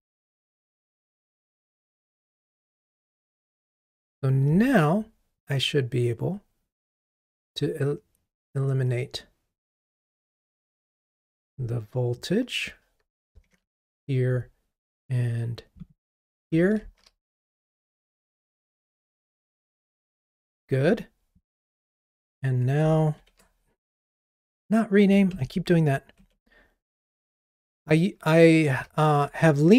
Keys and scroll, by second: 13.5 super+BackSpace, 17.0 ctrl+r, 23.3 shift+F6, 28.8 ctrl+t.